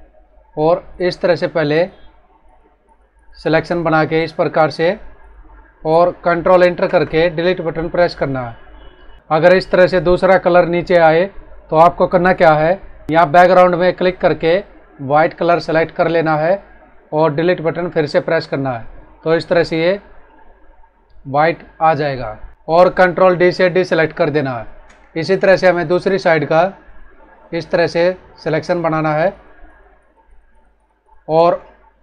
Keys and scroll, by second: 6.8 ctrl+Return, 8.3 Delete, 18.2 Delete, 22.5 ctrl+d, 23.7 space.